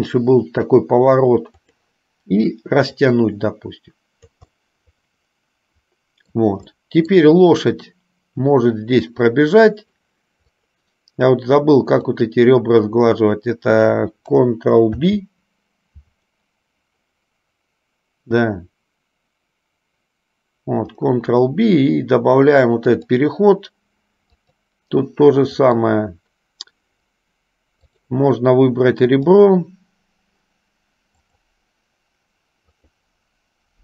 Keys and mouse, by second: 3.4-4.5 drag, 4.7-6.5 middle drag, 6.9 middle click, 10.9 click, 12.4 click, 15.2 ctrl+b, 25.7 click, 28.0 click, 29.4 click, 31.4 click, 32.9 click.